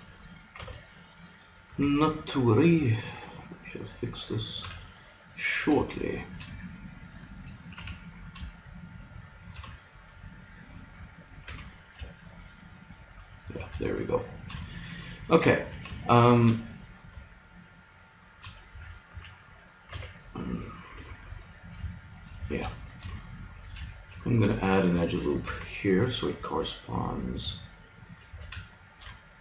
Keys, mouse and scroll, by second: 0.6 b, 1.7 g, 4.6-6.4 drag, 7.8 g, 9.8-12.1 middle drag, 11.5 g, 13.8-15.0 middle drag, 15.5 a, 16.2-17.4 drag, 17.4 middle click, 18.7 a, 19.1 a, 19.9 b, 21.0 g, 22.4 a, 25.5 ctrl+r, 28.1 click, 28.3 a.